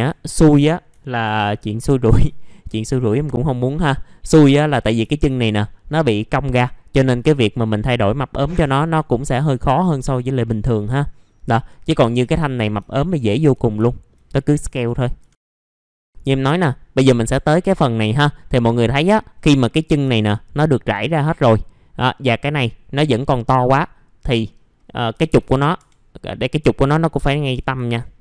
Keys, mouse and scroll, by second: 0.2 middle click, 0.4 scroll down 1, 1.8 middle click, 2.1 scroll down 1, 2.4 alt+middle click, 2.8 scroll up 1, 3.1 F4, 3.4 click, 3.9 middle click, 4.0-4.4 scroll down 1, 4.5 middle click, 4.8 scroll down 1, 5.1 alt+middle click, 11.2 scroll up 1, 11.6 click, 12.0 F4, 12.9 alt+middle click, 14.3 click, 14.8 F4, 15.4-15.9 scroll down 2, 15.7 middle click, 16.1-18.4 scroll up 1, 18.4 middle click, 18.5-18.9 scroll down 1, 18.9 middle click, 19.4 scroll up 1, 19.7 click, 20.2 alt+middle click, 22.2 scroll up 1, 22.6 middle click, 25.1-25.7 typing, 25.7 F3, 26.6-27.2 scroll up 1, 27.2 scroll down 1, 27.4 F3.